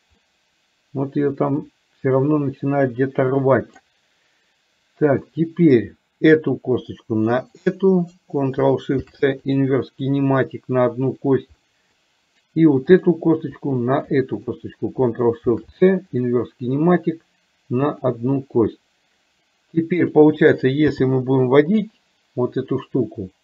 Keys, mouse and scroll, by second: 0.3-3.9 middle drag, 5.3 middle click, 6.5 click, 7.7 shift+click, 9.2 ctrl+shift+c, 11.8 middle click, 13.0 click, 14.2 shift+click, 15.5 ctrl+shift+c, 18.0 click, 20.2 click, 21.0 g.